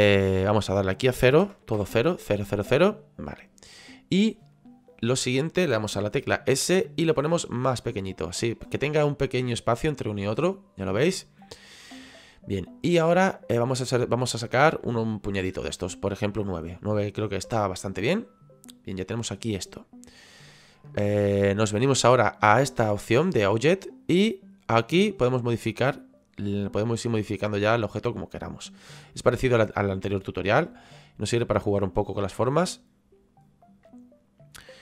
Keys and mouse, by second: 0.5 click, 1.4 KP_0, 8.7 click, 14.1 click, 17.2 middle click, 23.6 click, 25.2 click, 29.4 middle click, 31.3 click, 33.6 click.